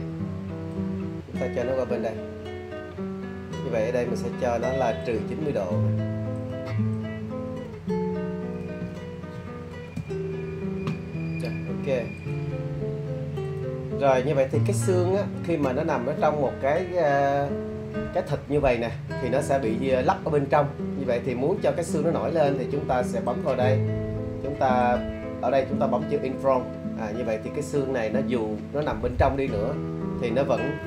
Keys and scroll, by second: 9.4 shift+0, 10.0 Return.